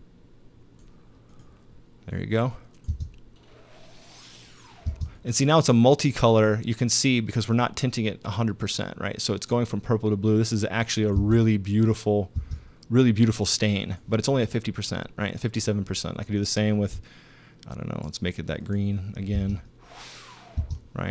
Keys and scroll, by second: 2.9 space, 4.9 space, 11.1 space, 12.4 space, 19.4 space, 20.6 space.